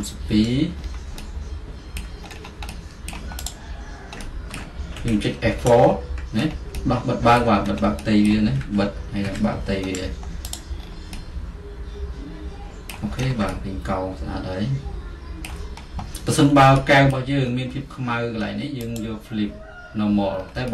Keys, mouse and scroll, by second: 1.0 alt+middle click, 2.4-4.2 middle drag, 4.2 alt+click, 5.1 F4, 5.7-6.9 middle drag, 7.7-8.8 middle drag, 8.7 F4, 9.3 F4, 9.9 middle click, 10.7 click, 16.5 middle click, 17.5-20.4 alt+middle drag, 20.4 click, 20.5 middle click.